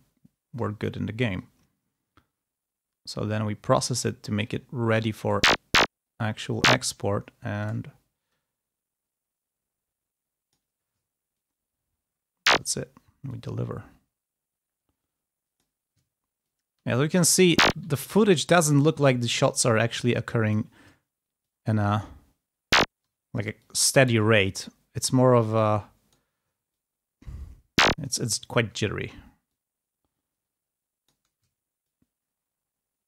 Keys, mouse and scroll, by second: 0.0 ctrl+scroll down 2, 1.2-4.6 drag, 5.2-6.9 ctrl+drag, 6.9-7.2 ctrl+scroll down 2, 7.2-7.6 ctrl+scroll up 2, 8.2-10.7 drag, 11.3-12.6 ctrl+drag, 13.2-15.7 drag, 16.3-17.8 ctrl+drag, 18.4-20.7 drag, 21.4-23.0 ctrl+drag, 23.5-26.3 drag, 26.7-28.0 ctrl+drag, 28.0 ctrl+scroll down 2, 28.3 ctrl+scroll up 2, 29.4-31.2 drag, 31.7-33.0 ctrl+drag.